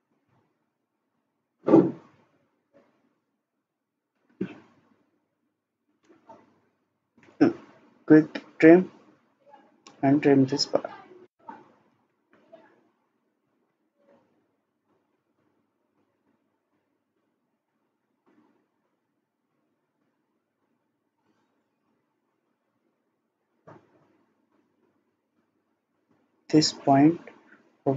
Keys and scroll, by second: 6.0 Escape, 11.9 ctrl+z, 13.0 Escape, 13.6 Escape.